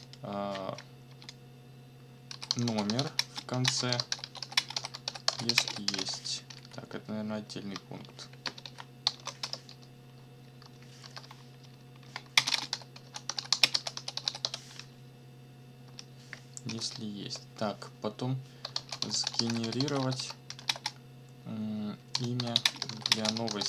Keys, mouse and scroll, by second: 1.1-6.5 typing, 7.9 ctrl+shift+Right, 8.6 Left, 9.0 BackSpace, 9.4 Return, 10.7 shift+Right, 11.0 shift+j, 11.7 ctrl+Right, 12.3 ctrl+space, 12.5 ctrl+d, 12.5 ctrl+space, 12.7 ctrl+b, 13.0 ctrl+v, 13.3 ctrl+t, 13.4 ctrl+y, 13.5 ctrl+b, 13.6 ctrl+space, 13.8 ctrl+c, 13.9 ctrl+w, 14.1 ctrl+t, 14.2 ctrl+y, 14.5 ctrl+s, 15.8 KP_1, 16.7 shift+0, 17.2 shift+Return, 18.5-23.6 typing.